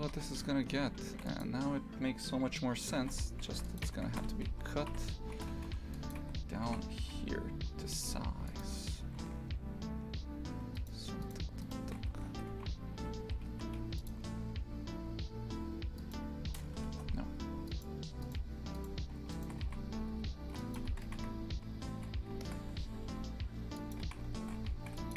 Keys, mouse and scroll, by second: 0.0 shift+f, 3.0 shift+f, 3.9 Tab, 5.4 shift+f, 6.2 3, 6.7 shift+f, 10.8 alt+shift+right click, 11.2 alt+shift+right click, 11.6 alt+shift+right click, 12.1 shift+f, 16.0 alt+shift+right click, 16.9 ctrl+z, 17.7 alt+shift+right click, 18.2 alt+shift+right click, 18.8 alt+shift+right click, 19.3 shift+right click, 19.6 shift+f, 20.8 Tab, 21.1 shift+f, 24.0 shift+f.